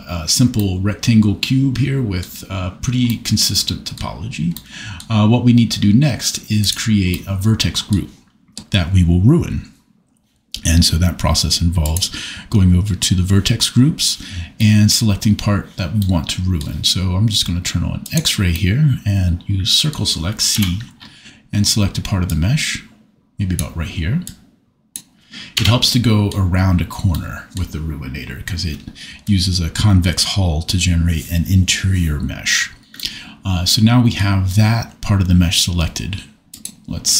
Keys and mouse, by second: 11.8 click, 20.5 c, 22.3 click, 25.6 Escape, 36.5 click.